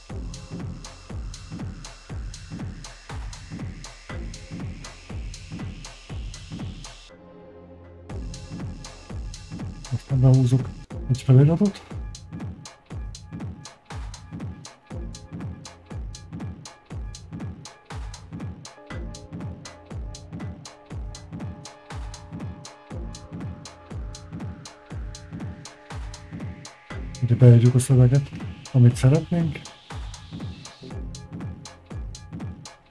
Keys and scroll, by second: 0.0-1.4 typing, 3.3-5.3 typing, 5.7 Tab, 28.7-29.7 typing, 30.7 í, 31.1 a, 31.8 í.